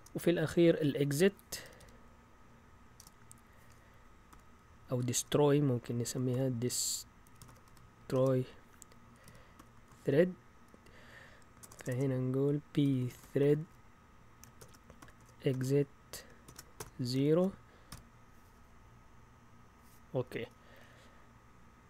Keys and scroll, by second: 0.0 Return, 0.0 typing, 1.6-19.7 typing, 10.8 Return.